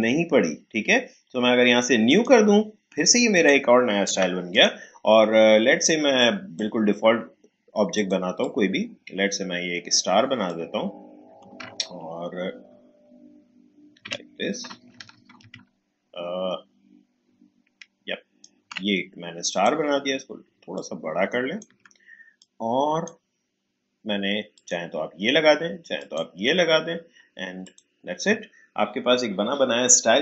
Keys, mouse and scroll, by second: 2.0 click, 3.1 click, 4.1 Delete, 4.5-19.5 drag, 20.7 alt+shift+click, 22.6-24.5 drag.